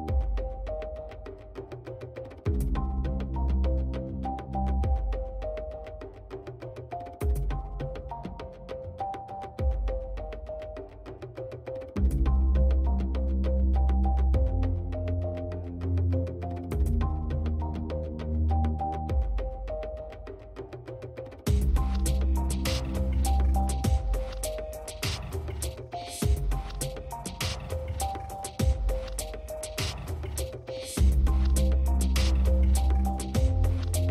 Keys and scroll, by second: 5.4 space.